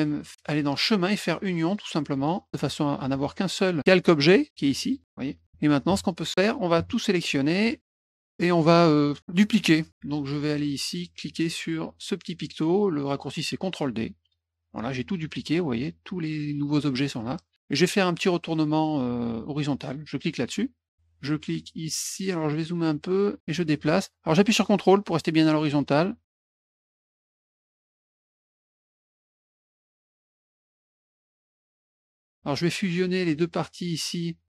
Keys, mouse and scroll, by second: 0.8 click, 1.6 click, 2.2 click, 3.1 F1, 3.5 click, 4.8 click, 5.0 click, 6.3 middle click, 7.8 click, 14.2 click, 20.2 click, 22.3 middle click, 22.5 middle click, 23.4-26.6 drag, 26.7 middle click, 27.3 middle click, 27.4 middle click, 28.3-31.7 drag, 32.1 middle click, 33.4 click.